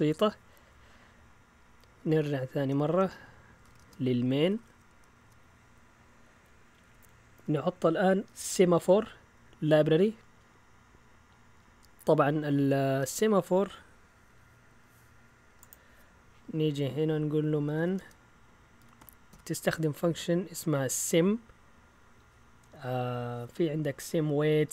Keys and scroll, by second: 2.8 ctrl+l, 3.3-7.3 typing, 5.2 Return, 17.4-19.8 typing.